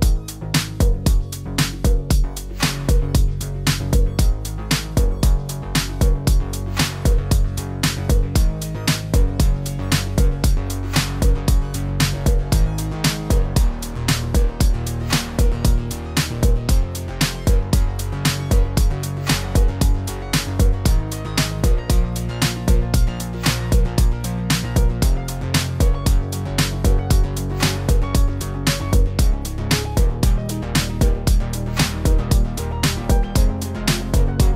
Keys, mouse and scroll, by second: 0.0 shift+middle click, 0.1-0.5 scroll up 2, 0.3 click, 0.5 click, 2.7 click, 3.1 click, 3.5 click, 3.9 click, 4.1 click, 4.3 shift+middle click, 4.5 click, 4.5 click, 4.9 click, 5.2 shift+middle click, 5.4 click, 5.5 click, 5.8 click, 6.0 click, 6.0 click, 6.4 click, 6.4 shift+middle click, 6.6 click, 6.7 click, 6.8 click, 6.9 click, 7.3 click, 7.4 click, 7.7 scroll down 2, 7.8 shift+middle click, 8.0 click, 8.0 scroll up 2, 8.1 click, 8.3 click, 8.6 click, 8.8 click, 9.1 scroll down 1, 9.2 middle click, 9.4 shift+middle click, 9.5 middle click, 9.6-10.1 scroll up 3, 9.7 shift+middle click, 9.9 Tab, 10.1 click, 10.2 middle click, 10.3-11.0 scroll down 7, 10.5 KP_4, 10.5 KP_1, 10.9 shift+middle click, 11.1 click, 11.4 e, 12.5 click, 12.7 click, 13.1 click, 13.1 g, 13.5 click, 14.1 scroll down 1, 14.2 s, 14.6 g, 15.2 shift+middle click, 15.5 Tab, 15.7 click, 15.8 click, 16.2 Down, 17.2 click, 20.2 click, 22.4 scroll down 3, 22.6 scroll up 1, 22.7 middle click, 23.1 click, 23.2 click, 23.3 click, 23.6 click, 24.1 click, 24.4 click, 25.0 scroll up 3, 25.2 shift+middle click, 25.6 middle click, 25.9 Tab, 26.0 middle click, 26.3 click, 26.8 Tab, 26.8 middle click, 27.0 shift+middle click, 27.2-27.6 scroll up 6, 27.5 shift+middle click, 27.6 click, 27.7 click, 28.1 scroll down 5, 28.3 scroll up 4, 28.8 click, 29.3 click, 29.7 click, 30.1 shift+middle click, 30.3 ctrl+z, 30.4 click, 30.5 click, 30.7 click, 31.0 shift+middle click, 31.1 click, 31.1 click, 31.6 click, 31.7 click, 31.7 click, 32.1 click, 32.2 shift+middle click, 32.4 click, 32.5 click, 32.8 click, 32.8 shift+middle click, 33.0 click, 33.1 click, 33.4 click, 33.5 click, 33.6 click, 34.2 click, 34.2 click, 34.2 click.